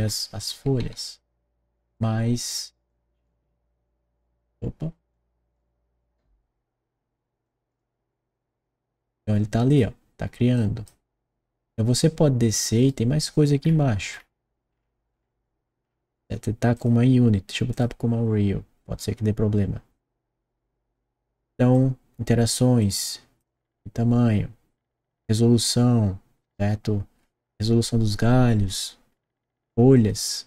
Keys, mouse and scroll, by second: 0.8 s, 1.9 click, 2.8 click, 5.0 click, 7.3 click, 9.7 click, 10.5 click, 12.6 right click, 13.6-16.1 middle drag, 16.7 click, 17.7 click, 21.7 click, 22.8 click, 28.6 middle click, 29.9 click.